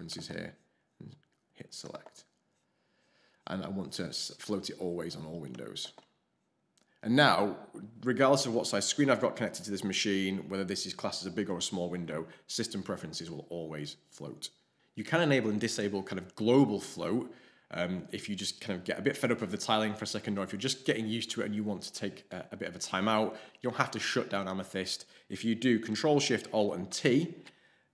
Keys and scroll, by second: 26.8 ctrl+alt+shift+t.